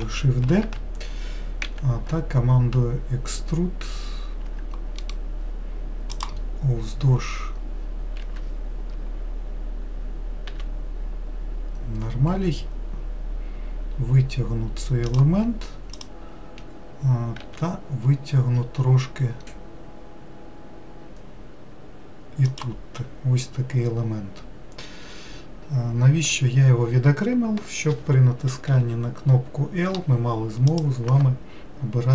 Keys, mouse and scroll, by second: 1.6 e, 5.0-8.0 right drag, 10.5 e, 15.9 click, 17.4 e, 30.7 click.